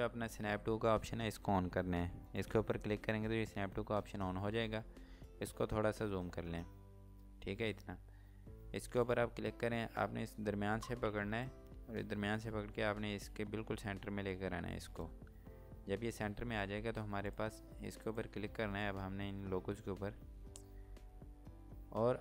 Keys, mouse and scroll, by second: 2.3 click, 4.8 scroll up 1, 6.5 scroll down 1, 6.8 scroll up 1, 7.3-7.7 scroll down 1, 7.7 scroll up 1, 8.8 click, 16.4 scroll down 1, 17.3 click.